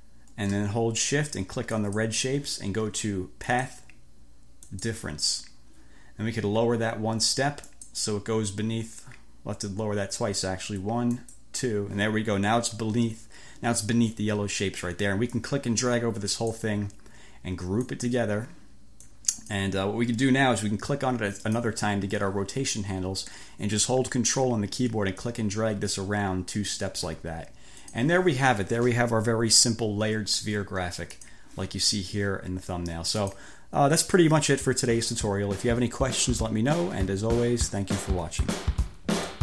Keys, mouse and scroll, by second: 1.8 shift+click, 3.6 click, 4.7 click, 7.8 click, 11.1 click, 15.5-16.9 drag, 17.9 click, 19.2-19.9 drag, 21.5 click, 25.3-27.3 ctrl+drag, 27.9 click, 31.3 click, 33.3 click, 38.5 click.